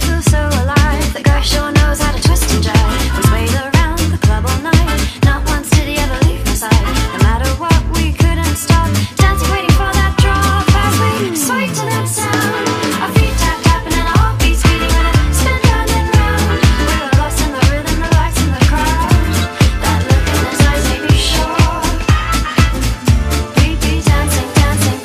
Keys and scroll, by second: 0.0-7.7 typing, 9.4 space, 10.5 space, 12.3-16.1 typing, 17.5 space, 17.7 space, 18.0 space, 20.1-22.5 typing, 24.9 space.